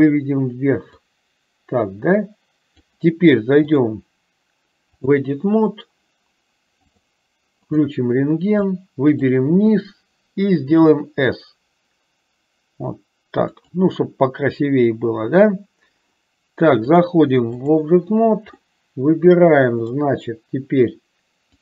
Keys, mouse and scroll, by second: 1.2-3.1 drag, 3.8-5.6 drag, 7.0 click, 8.0 click, 9.0 click, 10.8 s, 17.1-18.1 drag, 18.7-20.2 middle drag.